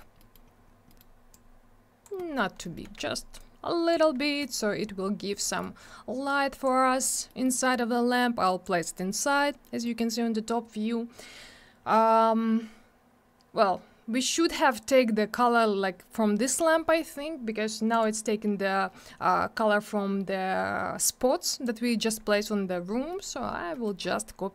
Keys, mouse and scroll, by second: 0.2 middle click, 0.3 middle click, 0.5 scroll up 1, 0.9 middle click, 1.0 middle click, 1.3 click, 2.2 middle click, 2.4 middle click, 2.5 scroll down 1, 2.6 middle click, 2.8 double middle click, 2.9 w, 3.4 click, 4.4 middle click, 4.6 middle click, 4.8 scroll down 1, 5.0-5.3 scroll up 1, 5.5 middle click, 5.6 scroll up 1, 6.3 click, 6.8 scroll up 1, 7.3 middle click, 7.5 middle click, 8.2 click, 9.7 middle click, 9.9 middle click, 16.6-16.9 scroll down 1, 17.9 click, 18.0 click, 23.1 middle click, 23.2 middle click, 23.5 scroll down 1, 23.7 middle click, 23.8 middle click, 24.0-24.5 scroll up 1.